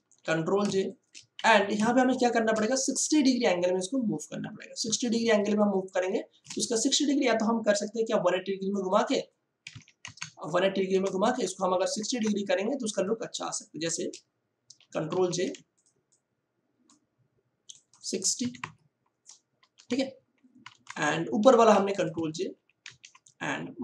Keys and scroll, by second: 0.2 ctrl+j, 0.6 ctrl+space, 1.3 ctrl+t, 1.7 ctrl+space, 2.4 space, 4.8 space, 9.6 1, 9.7 8, 10.0 0, 10.8 Return, 14.8 ctrl+j, 15.0 ctrl+t, 18.4 6, 18.6 0, 19.7 Return, 21.6 v, 22.5 ctrl+j, 22.8 ctrl+t.